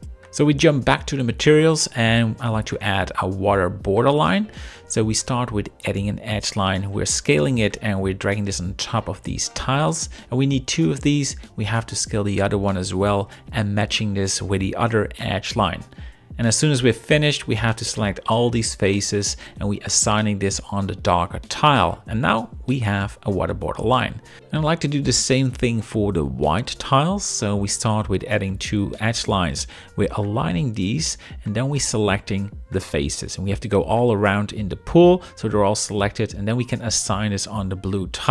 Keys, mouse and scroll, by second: 0.0 shift+scroll, 1.8 z, 2.4 0, 2.7 right click, 3.7 shift+middle click, 4.7 z, 7.3 shift+click, 7.5 shift+middle click, 7.9 middle click, 9.2 shift+click, 9.6 middle click, 10.3 ctrl+r, 10.7 click, 11.2-12.3 right drag, 12.6 z, 13.0 0, 13.3 click, 14.1 g, 14.3 z, 15.8 shift+click, 16.1 shift+middle click, 16.4 middle click, 16.4 shift+scroll, 17.3 ctrl+click, 17.5 middle click, 18.7 ctrl+click, 19.0 middle click, 19.9 ctrl+click, 20.8 click, 21.7 click, 22.2 click, 22.8 Tab, 25.3 alt+shift+click, 26.4 z, 28.1 shift+click, 28.4 shift+middle click, 29.3 g, 30.6 3, 31.2 click, 32.0 ctrl+click, 33.1 shift+middle drag, 34.4 ctrl+click, 34.7-35.1 middle drag, 36.1 click, 37.4 click.